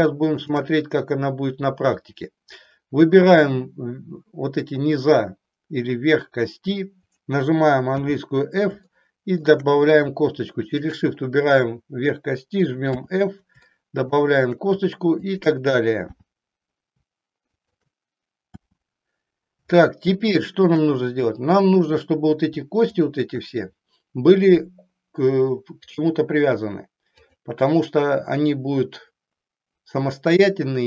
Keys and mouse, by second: 0.4 shift+click, 7.9 f, 8.9 shift+middle click, 10.6 shift+click, 12.9 f, 13.7 shift+middle click, 15.2 shift+click, 16.2 f, 17.6 click, 18.6 f, 19.9 middle click, 22.9 shift+click, 27.2 click.